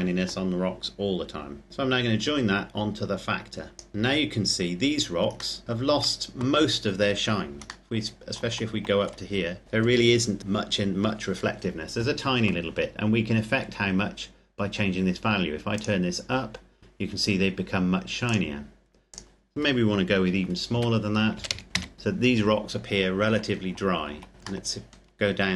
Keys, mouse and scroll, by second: 1.7 click, 3.9-5.4 scroll up 1, 5.4 middle click, 7.7 shift+middle click, 9.1-11.0 scroll up 1, 11.0-12.4 scroll down 1, 15.8 click, 18.4 click, 20.5 KP_Decimal, 21.2 KP_0, 21.7 KP_3, 21.7 KP_Enter, 23.8-24.3 shift+scroll down 2, 24.4 shift+middle click.